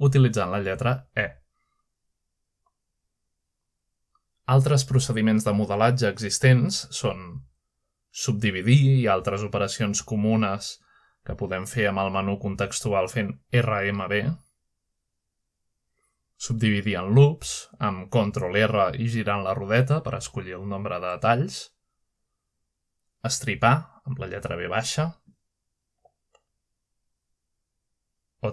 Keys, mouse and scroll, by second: 0.2 ctrl+right click, 1.7 ctrl+shift+middle click, 2.7 ctrl+right click, 3.1 shift+middle click, 3.6 middle click, 4.0 right click, 4.2 shift+click, 5.2 shift+click, 6.1 typing, 6.9 click, 7.4-9.0 shift+middle drag, 8.6 typing, 9.2-10.3 drag, 9.5-10.4 scroll down 1, 10.1-11.9 middle drag, 11.9 click, 12.7 shift+click, 13.4 shift+click, 14.8 right click, 16.0 click, 17.3-19.1 drag, 19.6 shift+middle click, 20.6 middle click, 21.5-22.7 typing, 22.7-23.5 ctrl+scroll up 1, 23.5-24.0 scroll down 1, 23.9-24.7 typing, 24.2-24.5 scroll down 1, 24.5 click, 25.7 click, 26.6-27.5 typing, 27.1-28.0 scroll up 1, 28.0 click.